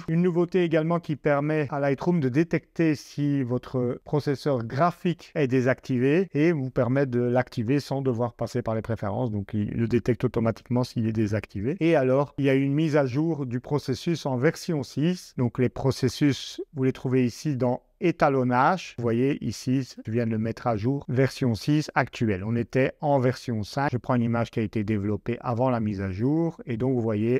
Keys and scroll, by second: 14.1 super+Tab.